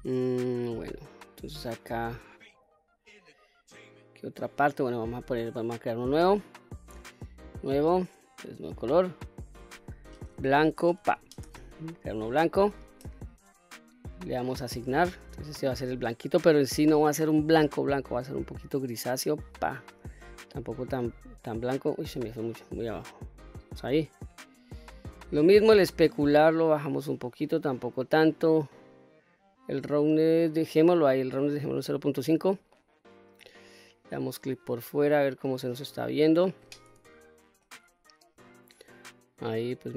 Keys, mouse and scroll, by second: 7.1 click, 8.3 click, 9.1-12.2 drag, 14.4 click, 16.1 click, 24.3-25.5 scroll down 3, 26.5-28.0 drag, 28.6-31.7 drag, 32.5 middle click, 33.2 click, 33.6-34.1 scroll down 2, 34.1-35.4 middle drag, 35.7-36.1 scroll up 1, 37.1 shift+middle click, 37.8-38.2 scroll up 1, 38.2-39.9 middle drag.